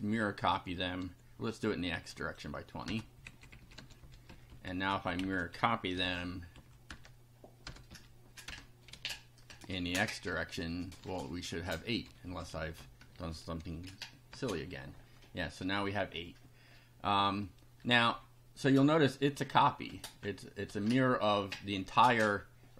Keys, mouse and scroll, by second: 1.5 ctrl+click, 2.2 click, 2.9 BackSpace, 3.3 Left, 3.8 2, 4.0 Up, 4.3 Down, 4.9 Home, 5.2 shift+End, 5.9 ctrl+c, 6.0 ctrl+Up, 6.9 Return, 7.6 BackSpace, 7.9 Up, 8.5 Return, 8.9 ctrl+v, 10.3 click, 11.1 1, 12.3 Delete, 12.5 Right, 12.8 Delete, 13.1 KP_0, 14.3 F5, 15.5 scroll down 2.